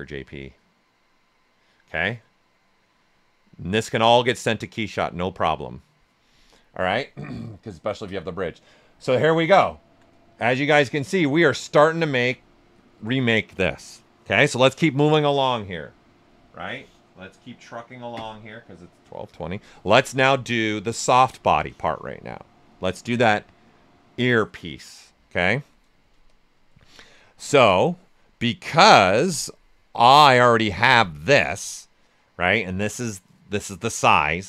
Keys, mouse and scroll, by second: 6.6-8.2 ctrl+right drag, 8.2 alt+right click, 9.2 ctrl+right click, 9.6 ctrl+alt+right click, 10.6 shift+f, 11.2 shift+f, 11.4 shift+right click, 19.6 right click, 19.8 right click, 19.8 typing, 20.9-26.2 alt+right drag, 23.8 typing, 26.0-26.7 typing, 26.2-28.4 drag, 28.4 right click, 29.4-30.7 drag.